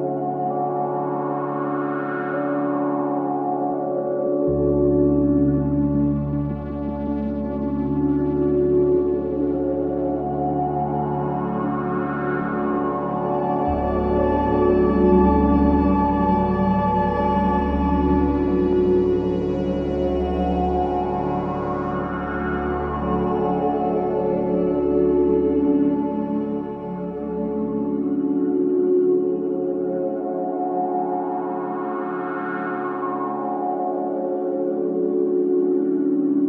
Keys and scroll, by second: 4.8 ctrl+shift+z, 10.6 ctrl+space, 12.6 space, 13.4 space, 13.4 a, 17.1 ctrl+shift+space, 17.7 v, 18.3 space, 33.4 p.